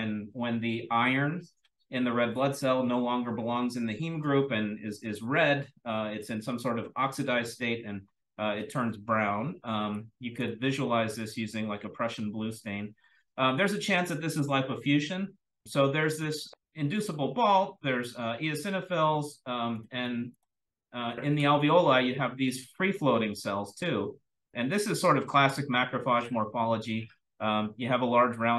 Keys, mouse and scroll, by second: 5.1-8.1 scroll up 1, 8.1-9.6 scroll up 1, 9.6-9.9 scroll up 1, 9.9-10.3 drag, 9.9-12.4 scroll down 1, 12.4-15.1 scroll down 1, 15.1-17.4 scroll down 1, 17.4-18.5 scroll down 1, 18.5-19.2 scroll down 1, 19.2-19.8 drag, 19.2-20.7 scroll down 1, 19.9-20.7 drag, 20.7-23.9 scroll up 1, 23.9-24.4 drag, 23.9-25.5 scroll up 1, 25.5-28.5 scroll down 1.